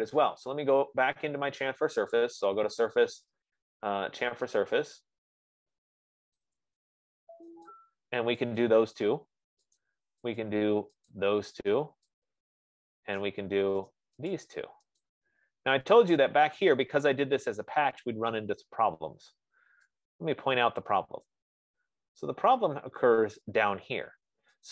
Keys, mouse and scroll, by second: 2.7 click, 7.2 click, 8.1 click, 9.1 click, 10.2 right click, 10.9 click, 11.5 click, 13.6 right click, 14.4 right click, 14.8 click, 15.5 click, 16.7 scroll, 17.7-18.4 scroll, 18.7 middle click, 19.4 middle click, 19.9 middle click, 21.6 right click, 22.0-22.4 scroll, 22.8-23.8 scroll, 24.0 F15.